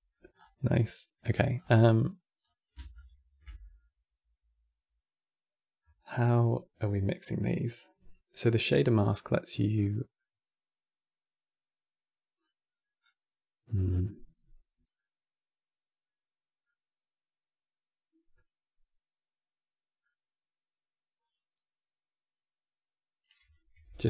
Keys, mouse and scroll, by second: 0.1 scroll down 5, 0.3 middle click, 1.3 scroll down 1, 1.4-2.1 middle drag, 2.1 scroll up 3, 2.8 ctrl+shift+click, 9.4-9.7 scroll up 6, 9.9-13.2 middle drag, 13.2 click, 16.6-21.8 middle drag, 21.8 click, 23.4 n.